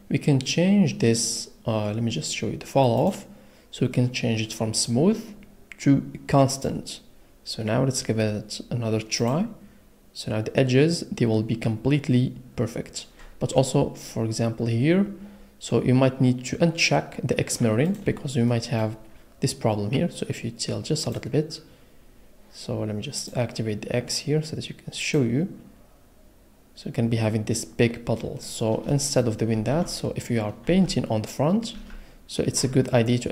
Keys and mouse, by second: 3.0-6.9 middle drag, 10.8 click, 17.8 click, 18.5 middle click, 21.3 click, 23.2 click, 26.8 click, 30.1 ctrl+z, 32.1 ctrl+z.